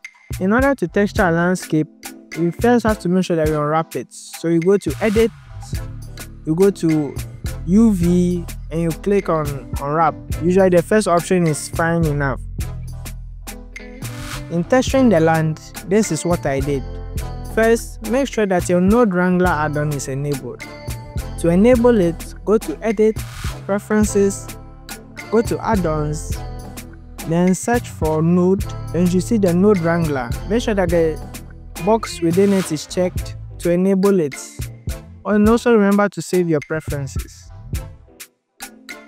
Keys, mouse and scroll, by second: 0.0 click, 1.5 click, 19.3 click, 20.4 click.